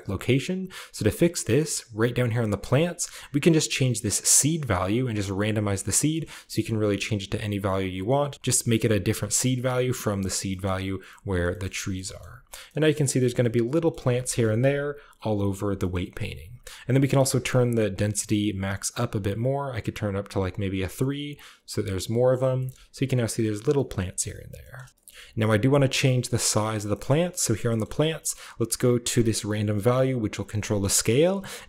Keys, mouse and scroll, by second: 1.4-2.2 scroll up 1, 1.6 middle click, 2.2-3.7 drag, 2.2-3.7 scroll up 1, 3.9-4.9 drag, 4.9 middle click, 5.3-6.3 drag, 5.3 typing, 5.5-8.3 middle drag, 5.7-6.4 scroll down 1, 6.4-8.3 shift+scroll up 1, 7.2-9.4 drag, 9.3-10.9 middle drag, 10.9-11.5 shift+scroll up 1, 11.3 shift+middle click, 11.5 shift+middle click, 11.5 shift+scroll down 1, 11.8 middle click, 12.2 middle click, 12.8 middle click, 12.8 scroll down 1, 13.0 shift+middle click, 13.8-14.9 middle drag, 14.1 KP_0, 14.9 scroll up 1, 15.6-16.4 shift+scroll up 1, 15.8-17.0 shift+middle drag, 17.1 click, 17.6 click, 17.7 1, 18.7 click, 19.8 click, 20.2 3, 20.2 click, 21.7 click, 22.6 shift+middle click, 22.6-23.6 scroll up 1, 23.9-24.5 middle drag, 23.9-24.9 scroll down 1, 24.6 shift+middle click, 24.9-26.0 scroll up 1, 25.0-26.8 middle drag, 26.0-26.4 scroll up 1, 26.4-26.9 scroll down 1, 26.9-27.8 scroll up 2, 27.0-27.5 middle drag, 27.1-27.5 typing, 28.2-29.3 scroll up 1, 29.3-30.8 drag, 29.7 scroll up 1, 30.5-31.6 scroll up 1.